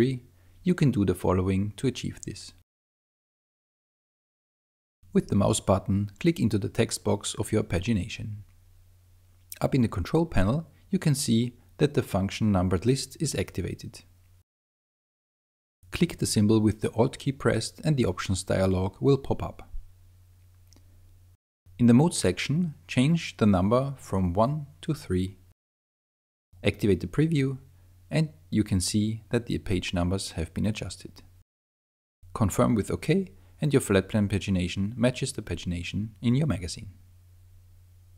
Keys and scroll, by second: 1.8 super+space, 25.4 3.